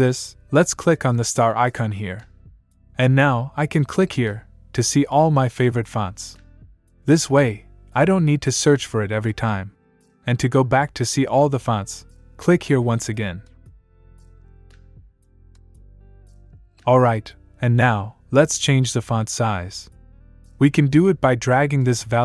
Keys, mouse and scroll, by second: 0.7 click, 4.5 click, 5.7 scroll up 1, 7.2 click, 12.5 click, 13.3-14.3 scroll up 1, 14.3-15.3 scroll down 1, 15.3-15.7 scroll up 1, 17.0 click, 21.0 click.